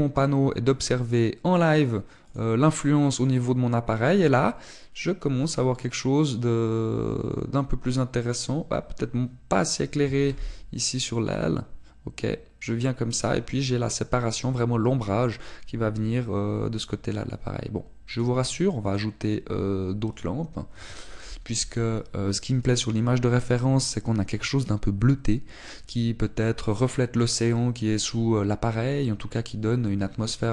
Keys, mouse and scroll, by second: 3.4 click, 10.9 g, 14.1 click, 19.0 click.